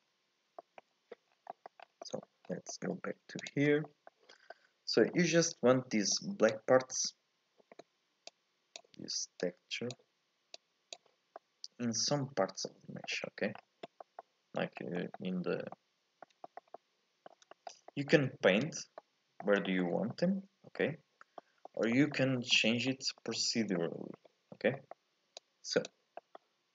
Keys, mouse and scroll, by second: 0.0-0.4 scroll down 2, 0.4 scroll up 1, 0.6 shift+middle click, 1.3 scroll down 4, 1.5-2.0 scroll up 4, 1.5 middle click, 2.0 middle click, 2.5 scroll up 1, 2.7 middle click, 3.5 ctrl+shift+click, 3.8-6.1 middle drag, 6.1 click, 8.3 click, 9.4 click, 10.5 click, 11.4-13.5 middle drag, 13.5-14.0 scroll down 1, 14.0-17.8 middle drag, 17.8 scroll up 1, 17.9-22.5 middle drag, 22.5-22.9 scroll down 1, 22.9-24.5 middle drag, 24.5 scroll up 1, 24.7 middle click, 25.4 click, 26.2 middle click.